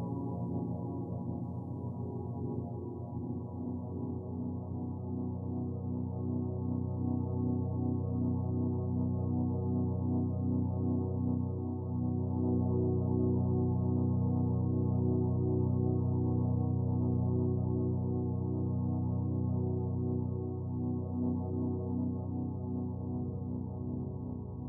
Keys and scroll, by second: 1.2 ctrl+z.